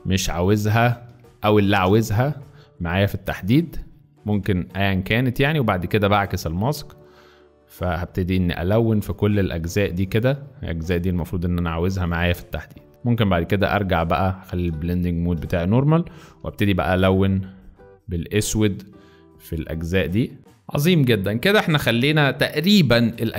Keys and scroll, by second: 1.5-1.9 typing, 4.4 space, 15.9 [, 16.1 [, 16.3 [, 16.4 [, 20.4 space.